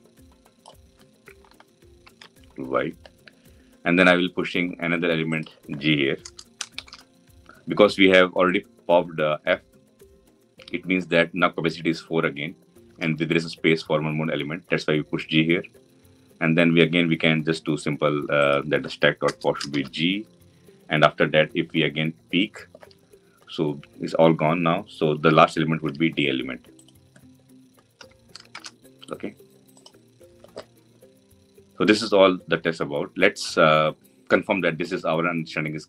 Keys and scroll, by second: 1.8 ctrl+y, 27.7 Delete.